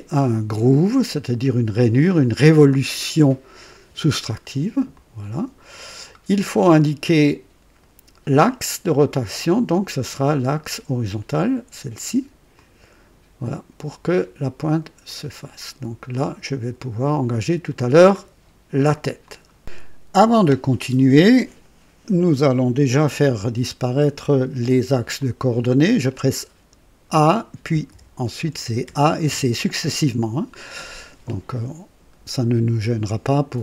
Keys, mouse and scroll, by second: 4.9 click, 6.5-7.3 right drag, 9.2 click, 12.5 click, 15.0 click, 16.1-18.4 drag, 19.2 click, 25.1-26.2 drag, 26.8-29.7 typing, 31.2 typing, 31.4-33.2 drag.